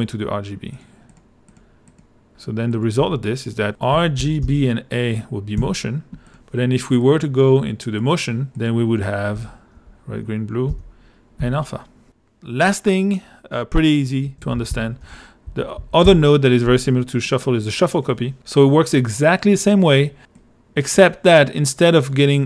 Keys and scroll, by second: 3.0-5.6 typing, 9.3 r, 9.8 g, 10.7 b, 11.4 a, 14.2-15.5 typing, 16.1 shift+Return.